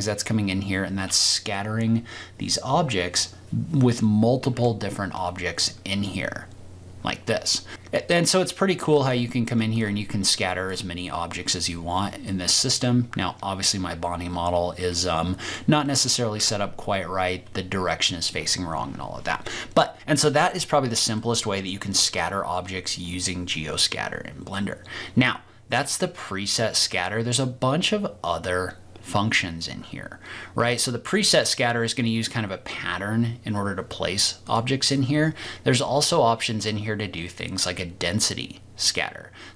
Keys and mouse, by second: 9.7 shift+click, 10.6 click, 12.2 click, 12.4 middle click, 14.9-15.5 middle drag, 15.8 middle click, 16.5 ctrl+z, 21.1-22.1 middle drag, 25.7 click, 26.9 click, 30.7 click, 34.4 click, 34.8 click, 36.6 click, 38.3-39.5 drag.